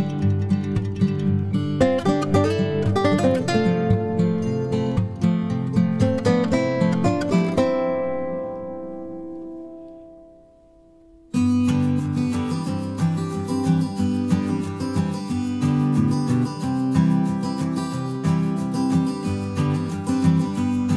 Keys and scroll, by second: 0.5 ctrl+shift+g, 5.2 b, 9.6 BackSpace, 14.2 ctrl+-, 15.1 Page_Down.